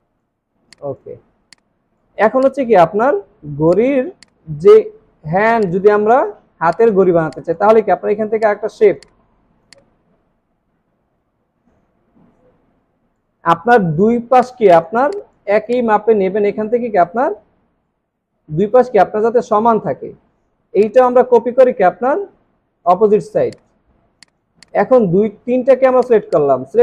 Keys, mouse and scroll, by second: 0.0 alt+scroll up 1, 0.0 space, 0.5 alt+scroll down 2, 1.2 alt+scroll down 2, 5.5 space, 6.2-6.6 alt+scroll up 3, 6.6 space, 7.0 alt+scroll down 3, 7.3 space, 8.4 right click, 11.2 space, 13.5 alt+scroll up 1, 15.0 space, 15.2 double click, 20.8 alt+click, 23.9 alt+scroll down 1, 24.1 space, 26.3 double click.